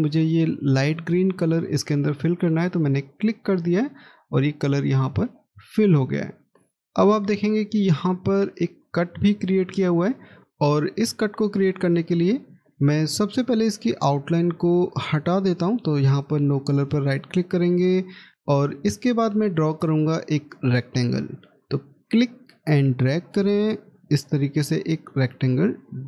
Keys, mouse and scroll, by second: 6.0 scroll up 1, 6.9 middle click, 10.4 middle click, 15.9 right click, 17.0 middle click, 22.7 middle click.